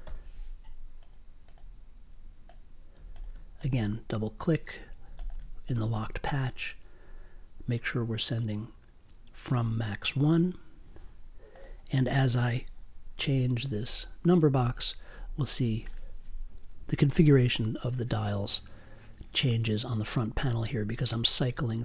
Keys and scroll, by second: 0.0 i, 2.9 space, 13.1 Up, 20.0 Up.